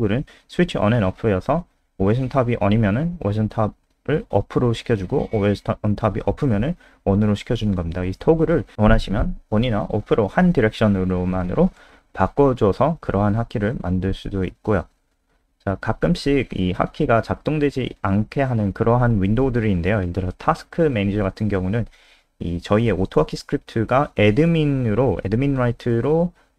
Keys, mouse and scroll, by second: 4.4 scroll down 1, 8.9 click, 9.1 click, 10.0 click, 18.4 ctrl+c, 18.6 click, 18.8 click, 19.6 Up, 20.0 End, 20.2 Return, 20.4 ctrl+v, 21.2 Down, 24.0 typing, 26.0-26.5 typing.